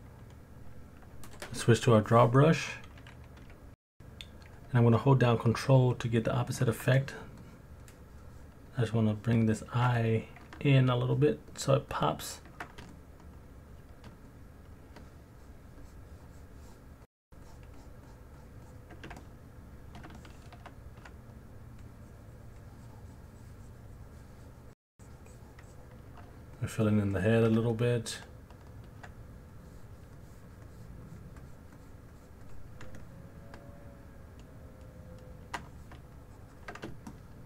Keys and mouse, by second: 4.0 middle click, 4.2 alt+click, 5.1 middle click, 5.2 alt+click, 5.9 alt+click, 7.4 ctrl+click, 7.8 ctrl+click, 8.2 ctrl+click, 8.7 ctrl+click, 9.1 ctrl+click, 9.5 ctrl+click, 10.0 middle click, 10.0 alt+click, 10.6 ctrl+click, 11.1 ctrl+click, 11.5 ctrl+click, 11.9 ctrl+click, 12.2 ctrl+click, 12.9 alt+middle click, 14.3 alt+middle click, 15.3 ctrl+click, 15.8 ctrl+click, 16.2 ctrl+click, 16.7-17.8 ctrl+drag, 18.1 ctrl+click, 18.6 ctrl+click, 19.2 middle click, 19.2 alt+click, 20.2 alt+shift+click, 21.8 click, 25.7 click, 26.6 shift+click, 27.1 shift+click, 27.7 alt+middle click, 28.1 alt+click, 29.5 click, 30.2 click, 30.6 click, 31.4 click, 31.7 click, 32.1 click, 32.5 click, 33.0-34.2 alt+middle drag, 34.2-35.5 alt+drag, 36.2 shift+click, 37.1 middle click, 37.3 alt+click.